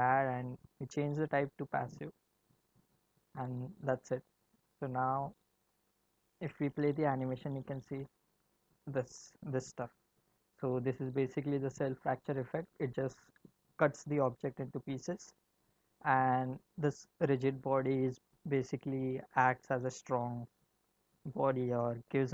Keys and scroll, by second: 6.6 space, 10.1 space.